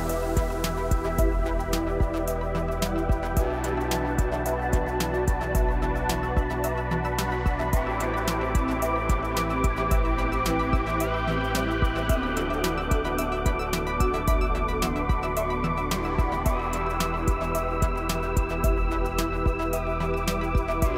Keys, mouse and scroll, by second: 6.0 middle click, 6.7 middle click, 7.9-9.3 middle drag, 9.5 middle click, 9.9 scroll, 10.2 middle click, 10.7-12.9 middle drag, 20.3-20.9 middle drag.